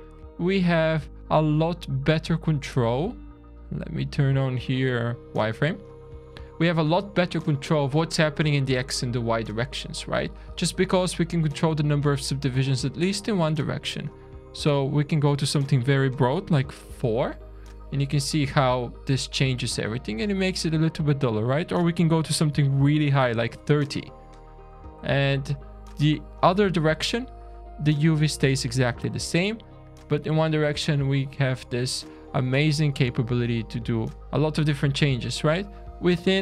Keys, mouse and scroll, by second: 0.7 middle click, 5.4 click, 5.7 scroll up 1, 6.3 shift+middle click, 7.5-8.5 scroll up 1, 12.7-13.1 scroll down 2, 13.1 middle click, 14.2 middle click, 15.2 click, 17.7-18.1 scroll down 4, 18.2 shift+middle click, 21.3 click, 24.1 scroll down 1, 24.2-24.5 scroll up 5, 24.8-25.7 shift+scroll down 5, 27.9 middle click, 29.2 shift+middle click, 35.9-36.2 scroll up 4, 36.2 middle click.